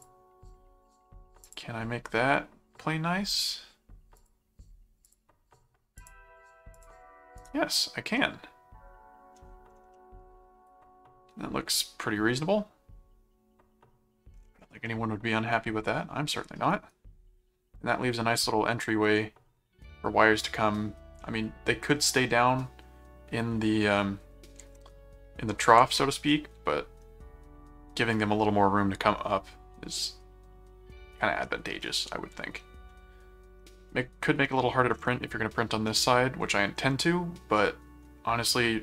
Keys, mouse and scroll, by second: 1.4 click, 3.3 click, 4.2 click, 5.1 click, 5.9 click, 6.7 click, 7.4 right click, 8.2-9.3 middle drag, 9.9-14.2 middle drag, 14.9-17.6 middle drag, 18.0-19.0 middle drag, 24.6 ctrl+Tab, 25.8 ctrl+shift+Tab, 32.1 middle click, 33.6-34.9 middle drag, 35.9 middle click, 37.0 middle click.